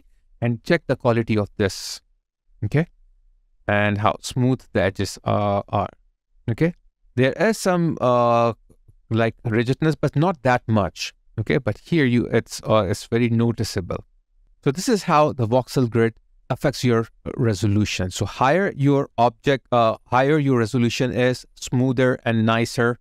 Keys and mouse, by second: 0.4 alt+right click, 2.4 alt+middle click, 2.9 alt+right click, 3.6 alt+click, 5.6 alt+middle click, 10.8 alt+click, 11.9 alt+middle click, 14.1 alt+middle click, 14.3 alt+right click, 17.6 alt+right click, 19.0 alt+middle click, 22.2 alt+middle click, 22.4 alt+right click.